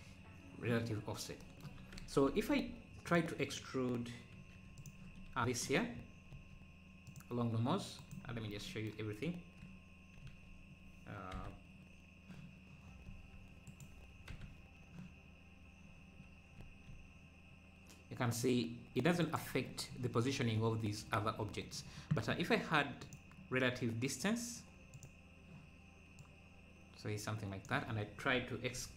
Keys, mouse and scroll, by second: 1.9 scroll up 1, 2.0 Tab, 3.0-5.2 drag, 5.2 scroll up 2, 5.7 alt+Left, 6.3 alt+e, 8.3-8.6 scroll down 1, 11.4 o, 13.1 s, 14.3 o, 16.6 s, 23.0-28.7 drag, 28.7 s.